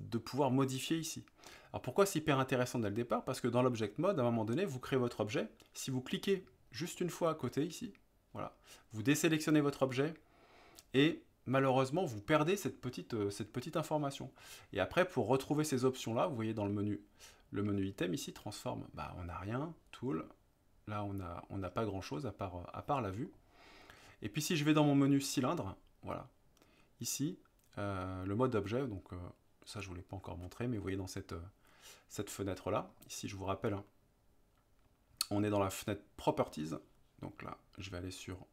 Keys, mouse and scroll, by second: 7.0 click, 15.1 middle click, 29.9 click, 32.9-36.3 drag.